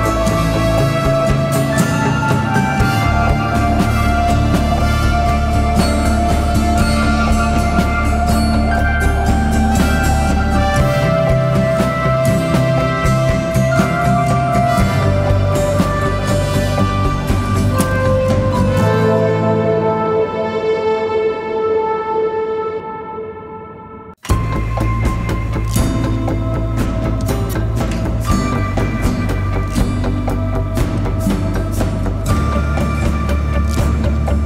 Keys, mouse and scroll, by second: 0.2 Return, 10.8-15.5 scroll up 1, 27.8 typing.